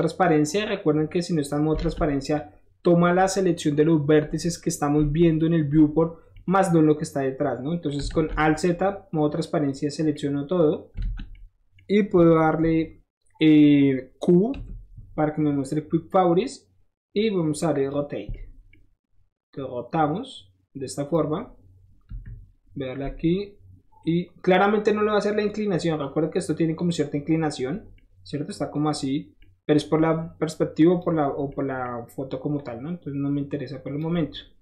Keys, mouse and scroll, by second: 1.8 alt+z, 2.3 click, 6.3-7.9 middle drag, 8.1 alt+z, 8.6-9.6 drag, 10.1 middle click, 11.0 alt+z, 11.3 middle click, 17.7 click, 18.3-18.7 middle drag, 19.5-21.1 drag, 22.1 KP_1, 24.0-25.4 drag, 25.7 scroll down 4, 26.3 scroll down 1, 26.4 middle click, 26.6 middle click, 27.8 scroll down 1, 27.9 middle click, 29.3 middle click, 30.8 click, 31.4 middle click, 32.5-34.0 drag, 34.1 middle click.